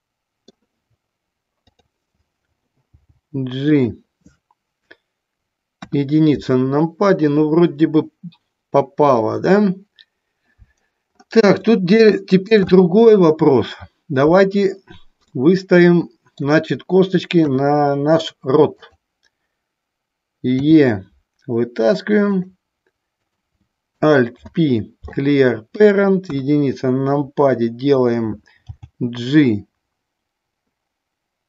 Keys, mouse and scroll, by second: 1.9 click, 3.2 g, 3.9 click, 5.9 KP_1, 11.9 shift+middle click, 15.5-16.6 middle drag, 17.5 KP_3, 18.9 click, 23.4 click, 24.6 alt+p, 26.6 KP_1, 28.8 g.